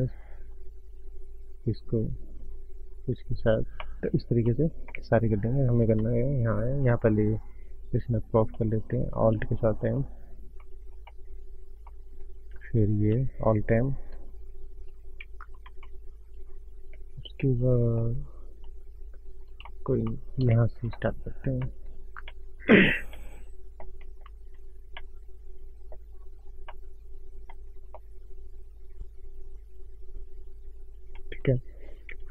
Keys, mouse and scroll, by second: 1.5 click, 2.2 click, 2.8 click, 3.8 middle click, 4.3 scroll down 1, 4.5 middle click, 4.9 shift+middle click, 6.0 middle click, 6.0 click, 6.0 scroll up 1, 6.4 shift+click, 8.0 click, 8.5 scroll up 1, 8.6 middle click, 9.9 alt+m, 10.6 scroll up 1, 10.7 middle click, 11.1 middle click, 12.8 scroll up 2, 13.2 click, 14.1 shift+click, 15.3 alt+m, 15.9 middle click, 16.9 middle click, 18.0-18.6 scroll down 4, 18.6 scroll up 1, 18.7 middle click, 19.7 shift+middle click, 20.1 shift+middle click, 20.5 shift+middle click, 21.3 middle click, 21.6 middle click, 22.3 scroll down 1, 22.6 middle click, 23.1 scroll down 1, 23.2 middle click, 24.0 middle click, 24.0-24.7 scroll up 1, 24.9 scroll down 1, 25.0 middle click, 26.7 middle click, 31.1 scroll down 2, 31.2 middle click, 31.5 scroll up 1, 31.6 middle click, 32.2 scroll up 1, 32.2 middle click.